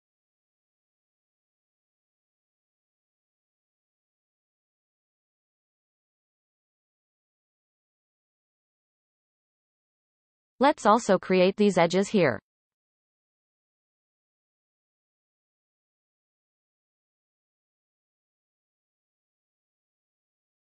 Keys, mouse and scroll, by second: 0.6 click, 1.4 shift+click, 1.9-2.6 scroll down 1, 2.6-3.8 shift+middle drag, 3.8-5.2 shift+drag, 5.9 shift+click, 6.8 f, 7.5 shift+middle click, 8.0-8.9 scroll up 1, 8.9 alt+a, 9.6-10.7 drag, 11.7 f, 12.2-13.5 scroll down 6, 15.0-15.5 scroll up 1, 15.5-17.0 shift+middle drag, 17.0 click, 17.6 shift+click, 18.4 f, 18.7-19.1 scroll down 3, 19.1-19.5 shift+middle drag, 19.5-20.3 scroll up 2, 20.3 click.